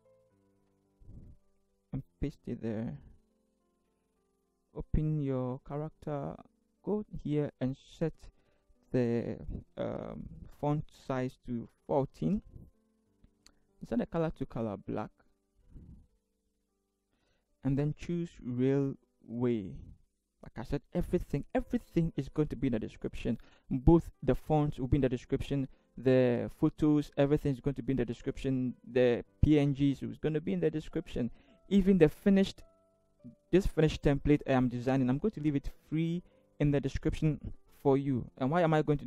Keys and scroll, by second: 0.3 ctrl+c, 2.0 ctrl+v, 11.1 1, 11.6 4, 12.2 Return.